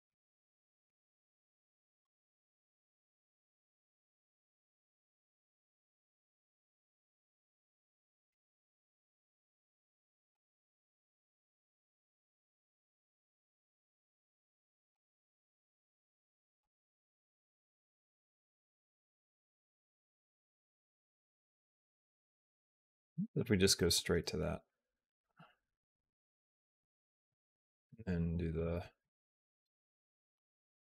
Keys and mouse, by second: 0.3 r, 2.3 click, 2.8-6.2 drag, 7.2 g, 8.5 g, 10.0 g, 12.8 r, 13.3 r, 14.8 g, 16.2 g, 20.6 r, 21.9 g, 23.6 click, 24.5-27.7 drag, 28.4 click, 30.2-30.8 drag.